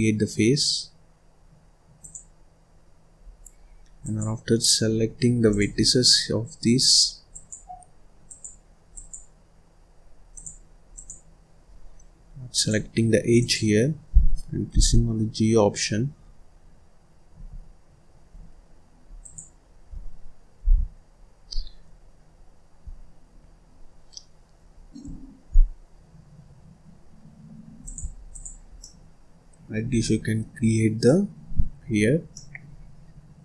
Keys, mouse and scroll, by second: 1.9 click, 3.1 scroll down 2, 3.5-3.9 scroll up 2, 3.9 click, 5.4 click, 6.6 click, 8.1 click, 8.8 click, 10.2 click, 10.8 click, 12.4 click, 13.2 click, 14.6 g, 19.1 click, 20.5 g, 28.2 click, 28.7-29.8 middle drag, 29.8 scroll down 1, 29.9 middle click, 30.4-30.9 scroll up 4, 30.9 middle click, 31.4-31.8 scroll down 1, 31.8-32.3 scroll up 1, 32.3 middle click, 32.8-33.1 scroll down 3, 33.1-33.4 scroll up 4.